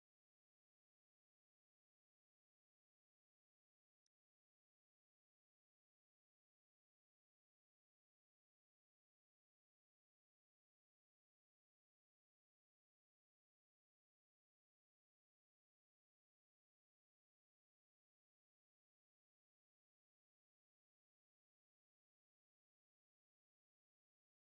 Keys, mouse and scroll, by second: 0.1 scroll down 6, 0.5 Home, 0.9 click, 1.0-1.6 scroll down 1, 1.6-4.1 drag, 4.9 scroll down 1, 5.1 z, 5.5 Home, 8.4 z, 10.0-11.1 drag, 11.1 z, 11.3 z, 11.9 click, 12.1 Home, 13.6 z, 14.0 click, 14.2 scroll down 3, 14.3 middle click, 14.4 click, 14.6 shift+a, 15.2 scroll up 5, 15.5 click, 15.9 z, 16.8-18.2 drag, 18.2 shift+a, 18.7 click, 19.0 shift+a, 19.8-20.5 ctrl+shift+drag, 20.6 click, 23.2-24.5 drag.